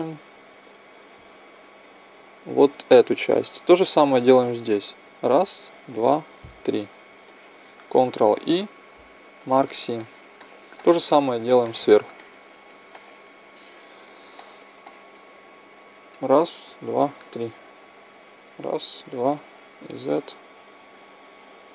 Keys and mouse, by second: 2.6-4.5 right drag, 5.1-8.4 right drag, 7.2 click, 7.9-10.8 middle drag, 8.4 ctrl+e, 15.7-20.8 right drag, 19.3 z, 20.0 click.